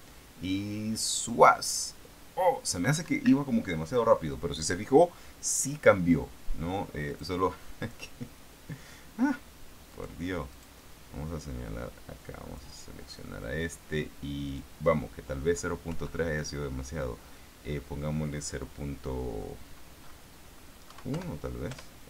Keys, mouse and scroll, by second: 3.4 Escape, 7.4 click, 8.2 click, 10.2 right click, 10.8 right click, 12.5 click, 14.8 click, 16.2 End, 16.7 Left, 21.2 KP_1, 21.4 Delete.